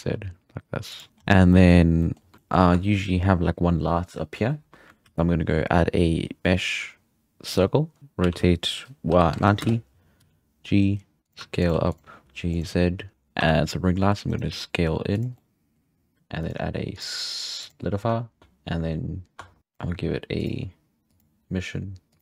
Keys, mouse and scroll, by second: 1.1 scroll down 4, 1.2 scroll up 5, 1.5 shift+middle click, 1.7-2.3 scroll down 2, 2.0 middle drag, 2.3 middle drag, 2.6-3.7 scroll up 1, 3.7 scroll up 1, 5.0 shift+a, 8.0 middle click, 8.2 r, 10.2 g, 11.4 r, 11.7 g, 12.8-13.1 scroll up 1, 13.1 Tab, 13.4 1, 14.0 e, 14.5 s, 15.3-16.4 middle drag, 16.4 click, 16.9-18.4 drag, 18.4 Tab, 19.3 Tab, 19.6 shift+click, 21.1-22.2 drag.